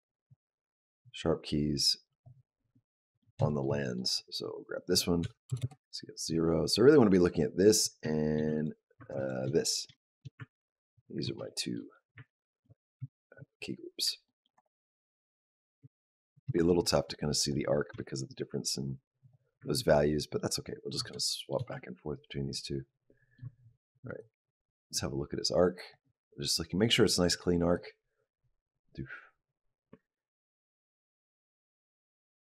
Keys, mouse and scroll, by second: 0.2 click, 2.6 middle click, 3.3 shift+middle click, 3.6 middle click, 4.6 click, 5.0 s, 8.4 ctrl+click, 9.0 shift+click, 9.8 shift+middle click, 10.2 ctrl+middle click, 11.3 shift+middle click, 12.1 ctrl+middle click, 12.9 shift+middle click, 13.6 scroll up 1, 14.1 shift+middle click, 14.4 click, 15.0 click, 15.7 ctrl+middle click, 16.3 shift+middle click, 16.6 shift+middle click, 17.2 click, 17.8 r, 20.3 ctrl+middle click, 20.8 scroll down 1, 21.0 shift+middle click, 21.6 ctrl+middle click, 24.1 click, 27.6 click, 32.2 shift+middle click.